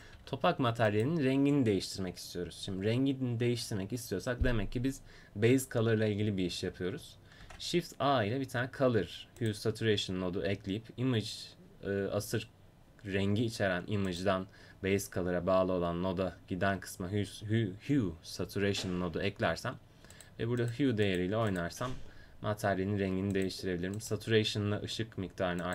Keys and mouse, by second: 0.1 g, 7.4 shift+a, 14.3-18.0 drag, 20.1-23.4 drag, 23.5-25.7 drag.